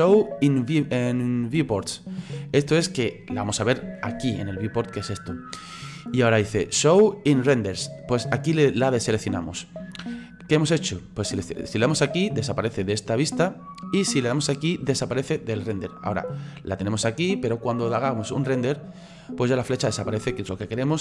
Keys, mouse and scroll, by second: 8.9 click, 11.8 click, 12.5 click, 12.9 click, 13.5 click, 18.0-21.0 drag.